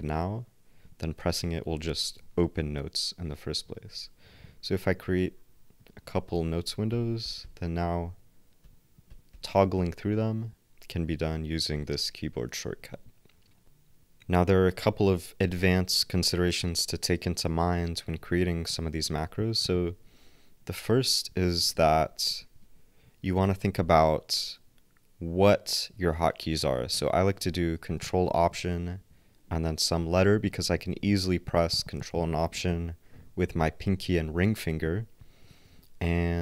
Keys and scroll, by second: 1.2 ctrl+alt+n, 6.4 ctrl+alt+n, 6.6 ctrl+alt+n, 6.9 ctrl+alt+n, 7.8 ctrl+alt+x, 8.6 ctrl+alt+n, 9.3 ctrl+alt+n, 11.8 ctrl+alt+w, 21.7 ctrl+alt+x, 22.4 alt+shift+x, 22.4 alt+super+Left.